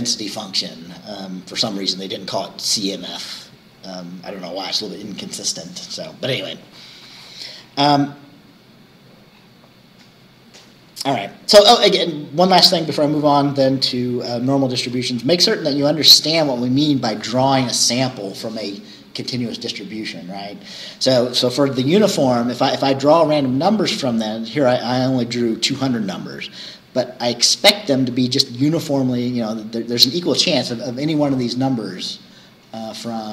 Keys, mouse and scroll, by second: 4.1-7.6 scroll up 1, 7.6-8.6 scroll down 4, 9.4-9.7 scroll down 2, 11.6 scroll down 2, 23.6 scroll down 2, 31.6-31.9 scroll down 2, 32.9 scroll down 2.